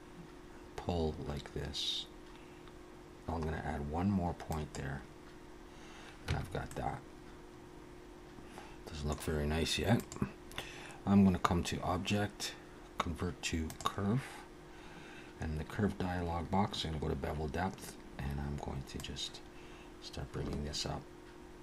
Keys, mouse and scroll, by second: 6.3 Tab, 6.7 middle click, 10.0 click, 15.6-16.9 scroll down 6, 19.0 click.